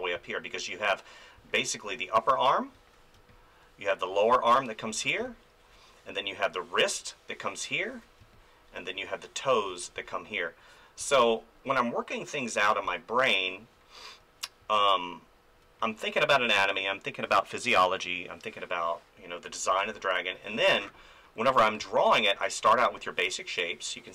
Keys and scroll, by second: 0.1 space, 2.7 ctrl+z, 3.1 space, 4.9 ctrl+z, 5.2 space, 7.9 ctrl+z, 8.2 space, 9.7 ctrl+z, 9.9 space, 12.9 space, 14.6 space, 19.7 space, 21.5 space.